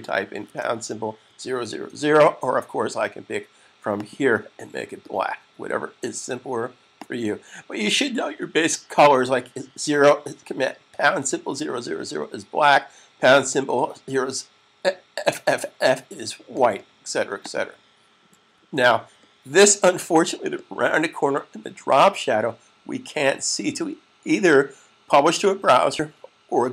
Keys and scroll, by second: 0.4-2.1 typing, 18.5 super+s.